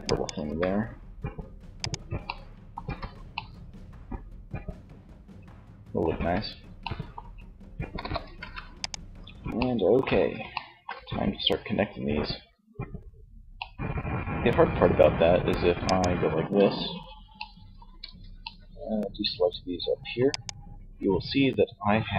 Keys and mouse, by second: 1.7 Tab, 5.1 Tab, 7.0 KP_3, 7.5 ctrl+s, 15.0-16.9 alt+right drag, 16.9 alt+c, 19.4 right click.